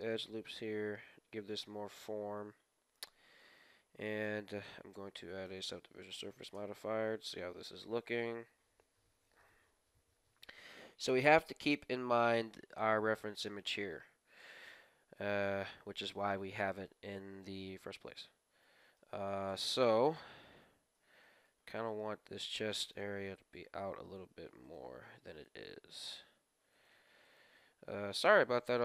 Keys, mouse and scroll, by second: 0.1 middle click, 1.0 ctrl+r, 1.0-3.2 middle drag, 3.4-5.0 middle drag, 4.2-5.9 drag, 6.0-8.8 middle drag, 6.6 Tab, 9.3-11.1 middle drag, 11.1-12.0 scroll up 1, 12.0 scroll up 1, 12.5-13.4 scroll down 1, 13.4-15.0 middle drag, 14.3 KP_3, 16.4 middle click, 16.7-17.9 scroll up 2, 17.7 middle click, 17.9-20.8 middle drag, 19.4 KP_2, 20.1 KP_3, 20.8 scroll up 1, 20.9-22.8 middle drag, 21.0 Tab, 21.8-23.5 right drag, 22.3-24.9 typing, 24.1 Tab, 24.6 right click, 26.0 right click, 26.0 g, 26.7-28.2 right drag, 27.9 g, 28.4 right click, 28.4 g.